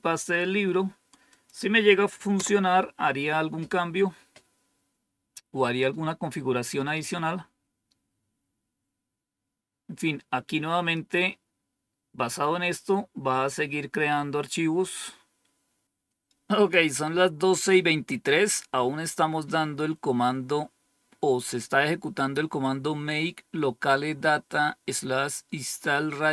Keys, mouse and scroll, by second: 1.2 click, 2.3 Return, 18.3-19.9 scroll down 3, 19.9-20.7 scroll up 2.